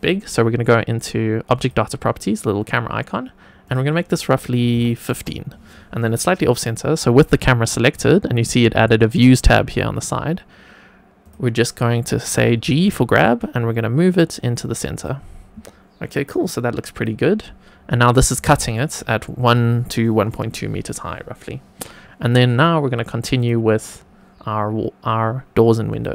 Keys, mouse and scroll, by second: 1.5 click, 3.6-5.1 drag, 12.5 g, 14.9 click, 16.9 click, 17.7 scroll up 1, 18.5 shift+middle click, 23.3 click, 25.8-26.1 drag.